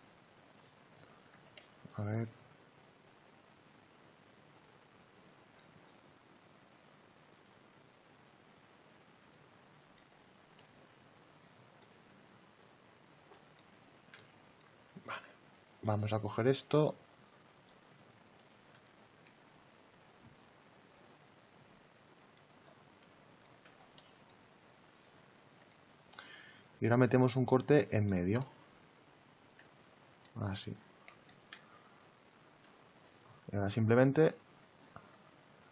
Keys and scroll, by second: 1.2 ctrl+z.